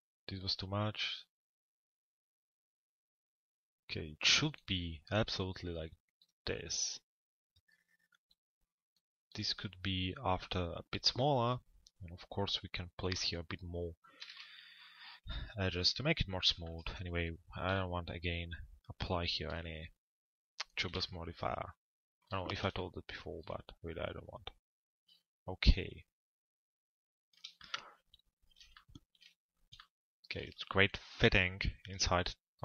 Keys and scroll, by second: 15.5 p.